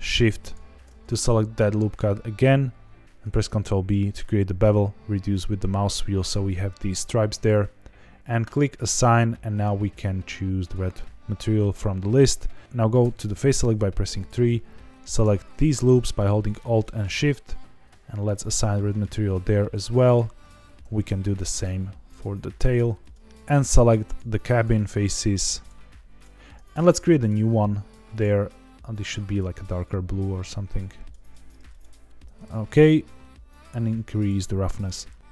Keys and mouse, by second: 3.2 ctrl+b, 6.7 click, 9.5-10.7 drag, 13.0 3, 14.1 alt+click, 15.6 middle click, 16.8 middle click, 18.7 middle click, 20.0 alt+click, 22.4 click, 22.9 click, 27.1 click, 28.2 drag, 31.7 click, 32.2 Tab, 33.7 click.